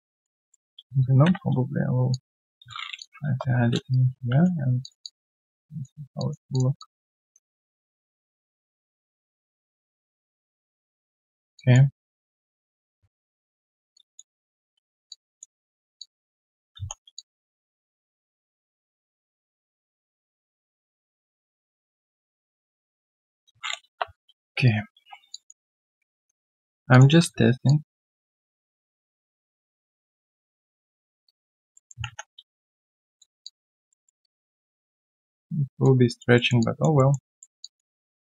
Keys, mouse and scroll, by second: 0.1 alt+click, 0.4 alt+middle click, 1.2 ctrl+shift+x, 3.2 ctrl+s, 3.4 Return, 3.4-3.9 scroll down 1, 3.9 right click, 4.9 3, 5.0 alt+click, 6.0 alt+right click, 6.1 alt+click, 6.7 alt+click, 7.4 1, 7.9 alt+click, 11.3 alt+right click, 11.5 alt+click, 11.8 alt+right click, 12.1 alt+click, 12.5 alt+middle click, 14.3 Return, 15.1 alt+click, 15.9 alt+click, 17.1 3, 17.1 alt+click, 17.9 1, 21.4 shift+click, 23.0 shift+click, 24.1-24.6 scroll down 1, 24.6 alt+right click, 25.3 alt+click, 25.3 q, 25.6 alt+right click, 26.1 right click, 26.1 w, 27.6 ctrl+shift+click, 31.2 alt+click, 31.7 alt+middle click, 32.4 right click, 33.4 alt+click, 33.9 alt+middle click, 34.2 alt+click, 35.7 alt+click, 36.3 alt+middle click, 36.6 alt+click, 36.9 alt+middle click, 37.6 alt+click, 37.9 alt+right click.